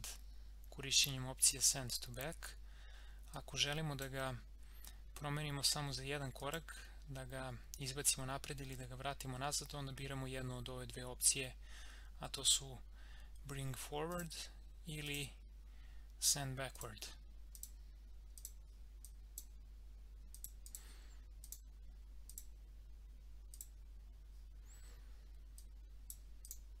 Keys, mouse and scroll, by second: 1.4-6.3 drag, 14.1-26.5 drag.